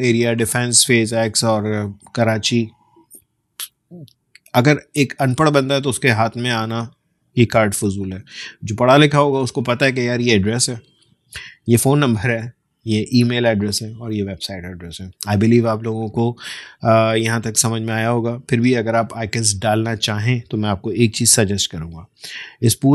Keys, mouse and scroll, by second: 21.0 ctrl+;, 22.3-22.9 drag.